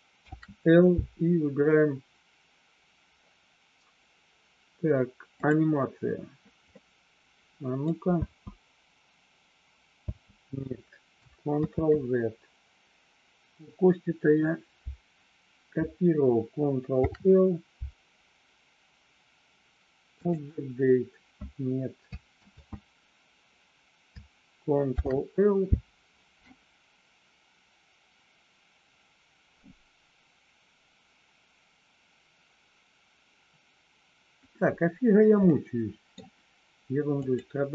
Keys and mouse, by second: 0.3 ctrl+l, 6.9 middle click, 8.1 space, 10.3 space, 12.2 ctrl+z, 17.0 ctrl+l, 23.2 ctrl+z, 24.9 ctrl+l, 35.6 middle click, 37.2 click.